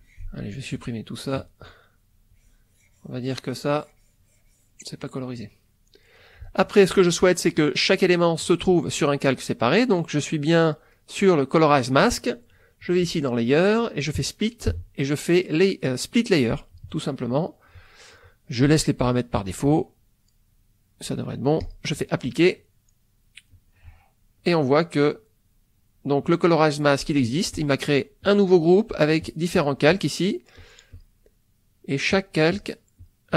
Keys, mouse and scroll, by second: 0.0 click, 0.5 click, 1.2 click, 2.2-4.9 drag, 5.0-6.0 middle drag, 6.4 ctrl+middle click, 6.5 ctrl+middle click, 7.8 middle click, 13.1 click, 16.5 click, 21.7 click, 23.5-24.6 drag, 26.2 click, 27.5 click, 28.3 click, 29.4 click, 30.6 click, 32.1 click, 32.6 click, 33.0 click.